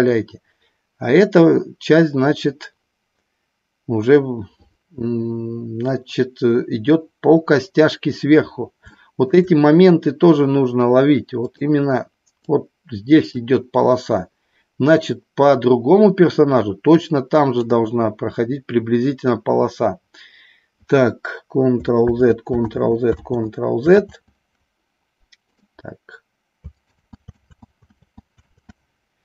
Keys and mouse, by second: 8.9 shift+middle click, 11.5 click, 12.5 click, 17.0 click, 22.0 ctrl+z, 22.6 ctrl+z, 23.1 ctrl+z, 23.9 ctrl+z, 25.4 click, 26.8 ctrl+z, 27.4 ctrl+z, 27.9 ctrl+z, 28.5 ctrl+z.